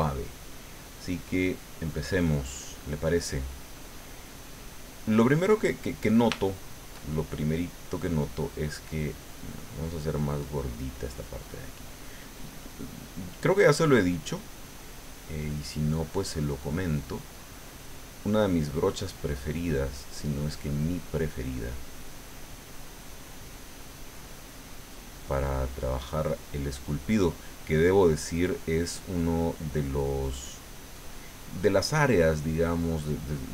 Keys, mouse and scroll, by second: 0.4 click, 1.6 click, 2.7-4.5 middle drag, 4.5 middle click, 5.2-8.3 middle drag, 8.4 middle click, 9.1 middle click, 10.2 click, 11.1 middle click, 12.4-13.6 drag, 13.6 middle click, 14.5-19.1 drag, 18.2-19.9 middle drag, 20.1 middle click, 21.1 middle click, 22.4 middle click, 23.2-26.4 drag, 26.5-28.7 drag, 28.8 middle click, 30.0-32.5 drag.